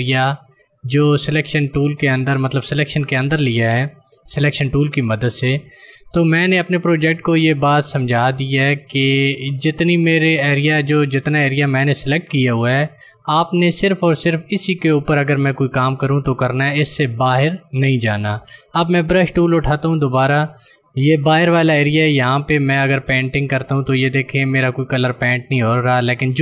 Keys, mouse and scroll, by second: 19.2 click, 22.0 click.